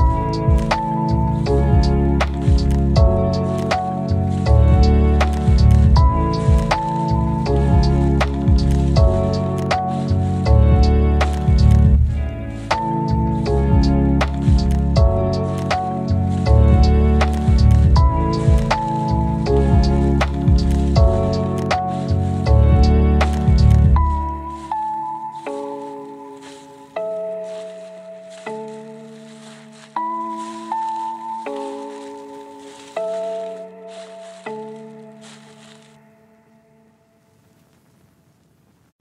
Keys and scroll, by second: 12.1 ctrl+z, 15.1 ctrl+z, 16.5 ctrl+shift+g, 28.2 ctrl+z, 34.6 ctrl+z, 35.1 ctrl+alt+shift+z, 35.6 ctrl+alt+shift+z, 38.4 ctrl+c.